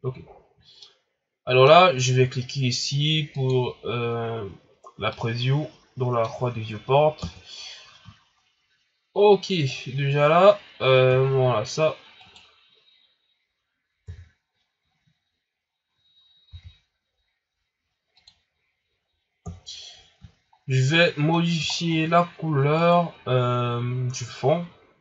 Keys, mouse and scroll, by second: 0.8-3.6 middle drag, 3.6 click, 5.1-7.2 middle drag, 7.2 KP_0, 8.1 shift+scroll down 4, 8.5 scroll up 5, 9.7 scroll down 1, 10.4 scroll up 1, 10.7 scroll down 1, 11.1 shift+scroll up 5, 12.2 right click, 14.0 KP_3, 14.9 scroll down 4, 15.5-15.9 scroll up 2, 16.5 r, 19.4 KP_0, 20.2 shift+scroll down 4, 20.5 scroll up 4, 21.3-21.9 scroll down 3, 22.0 scroll up 1, 22.7 right click.